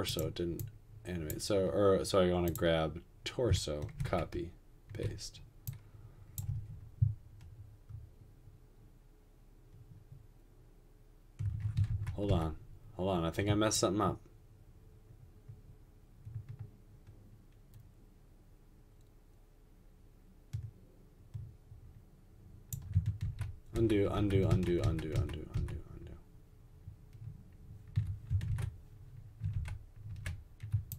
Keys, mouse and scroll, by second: 4.1 ctrl+c, 4.3 ctrl+v, 6.5 space, 11.5 space, 11.9 ctrl+z, 12.5 ctrl+z, 23.3 ctrl+z, 23.9 ctrl+z, 24.4 ctrl+z, 24.6 ctrl+z, 29.8 ctrl+z, 30.4 ctrl+z.